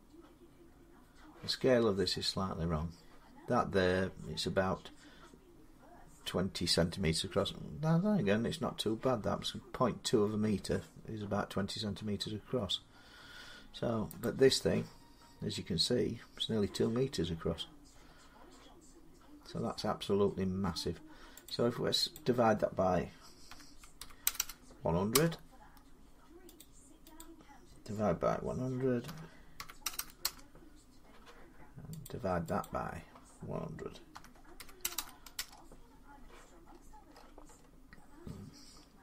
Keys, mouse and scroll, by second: 0.5 scroll up 5, 11.9-14.0 scroll down 7, 14.0 scroll, 14.0 click, 16.8-17.9 scroll, 21.2 click, 21.9 click, 23.3-24.0 typing, 24.9 Return, 26.4 click, 26.9 typing, 27.0 click, 28.6-30.0 typing, 31.8 click, 32.4 click, 33.7-35.1 typing, 36.4-37.5 scroll, 38.6-39.0 typing.